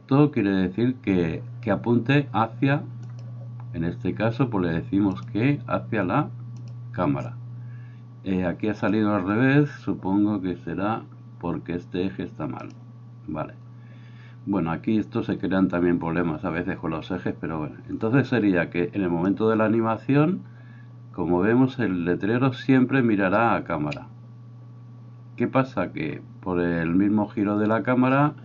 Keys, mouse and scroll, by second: 12.8-19.4 middle drag, 19.4-28.4 drag.